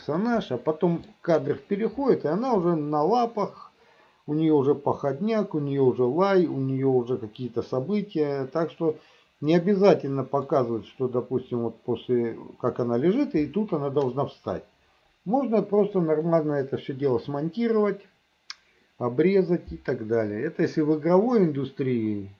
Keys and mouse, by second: 0.3 middle click, 9.1-10.6 middle drag, 21.5-22.3 middle drag.